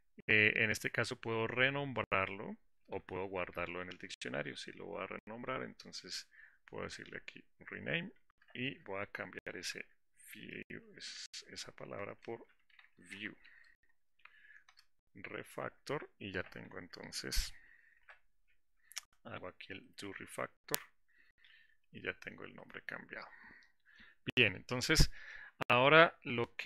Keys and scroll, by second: 17.3 Down.